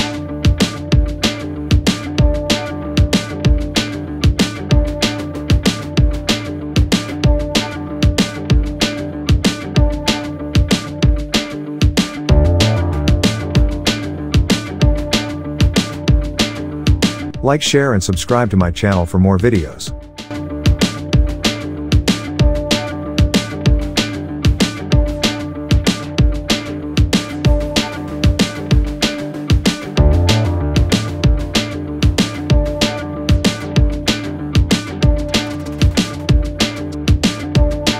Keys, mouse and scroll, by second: 5.4 alt+Down, 8.6 click, 9.3 alt+scroll down 1, 11.0-11.4 alt+scroll up 1, 12.2 alt+scroll up 1, 12.8-13.6 alt+drag, 15.8-16.9 alt+scroll down 1, 17.5 click, 19.5 shift+click, 20.4 click, 21.3 shift+click, 22.8-26.8 drag, 28.7 click, 29.9 shift+click, 31.0 alt+scroll up 1, 31.7-34.1 drag, 34.4-35.3 alt+scroll down 2, 35.3-35.9 alt+scroll up 1, 36.2 space, 36.4 click, 36.5 space, 37.1-37.9 shift+drag.